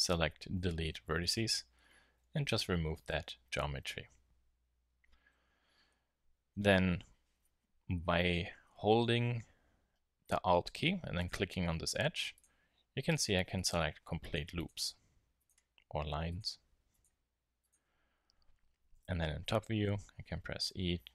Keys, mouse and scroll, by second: 2.2 z, 18.9 KP_7, 20.7 e.